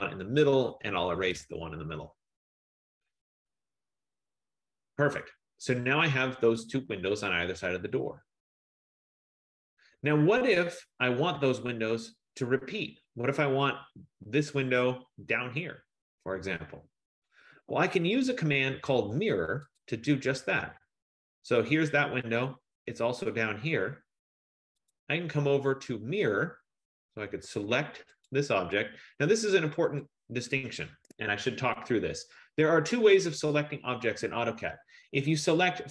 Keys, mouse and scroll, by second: 0.8-4.2 typing, 2.8 middle click, 3.5 scroll, 3.7 middle click, 10.1 middle click, 10.3-13.4 scroll, 20.0 click, 27.3 F15, 28.5 click, 30.1 click, 31.3 Escape, 31.9-32.9 scroll, 32.0 middle click, 32.1 middle click, 32.9-33.3 scroll, 33.8-34.8 scroll.